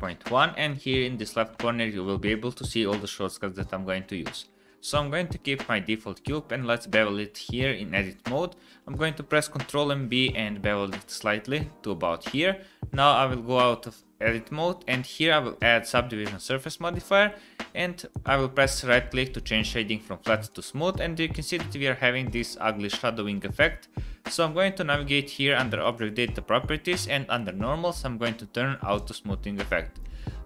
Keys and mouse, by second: 6.5 Tab, 9.7 ctrl+b, 12.6 Tab, 15.1 click, 15.8-16.9 drag, 18.1 right click, 27.3 click, 28.9 click.